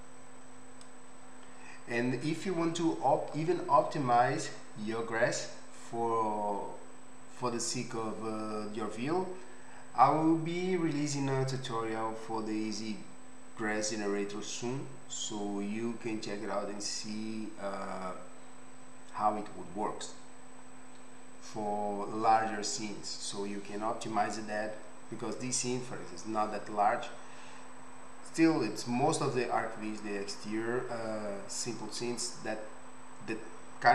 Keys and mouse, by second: 0.2 middle click, 0.3 click.